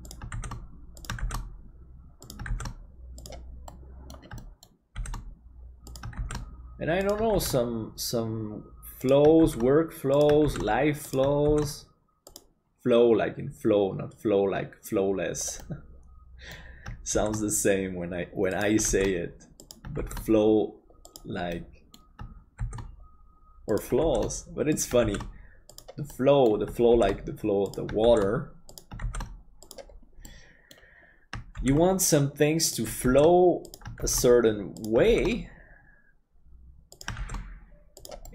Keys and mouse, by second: 3.8 middle click, 4.5 shift+middle click, 15.6-16.6 middle drag, 17.2 shift+d, 21.7 middle click, 26.3 middle click, 30.3 middle click, 35.4 shift+d, 37.3 shift+d.